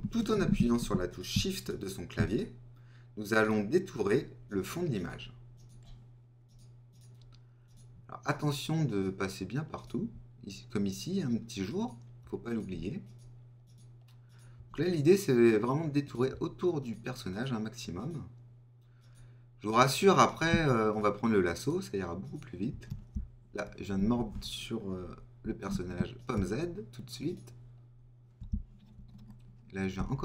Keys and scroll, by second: 23.9 super+z, 29.9 alt+super+z.